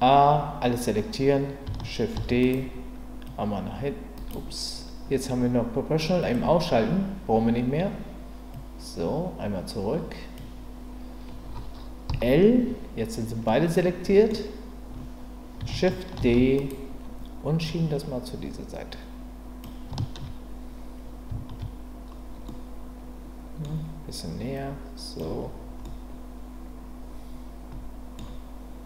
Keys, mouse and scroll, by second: 2.1 shift+d, 3.3 click, 4.3 right click, 8.6-10.3 drag, 12.1 l, 13.5 middle click, 16.2 shift+d, 17.7-19.6 drag, 22.5-23.7 middle drag, 24.5 click, 25.8-28.2 middle drag.